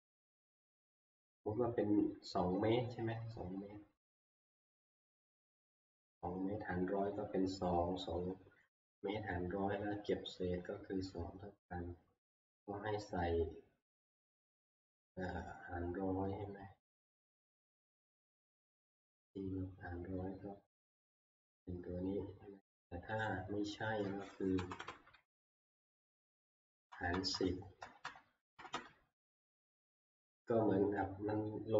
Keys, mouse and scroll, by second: 17.2-22.1 drag, 23.3-24.8 drag, 24.6 Left, 24.8 Left, 25.3 ctrl+v, 26.2 Right, 26.5 Right, 26.7 Right, 26.9 Right, 27.1 Right, 27.3 Right, 27.8 Right, 28.0 Right, 28.6 Right, 28.7 Right, 29.5 ctrl+v.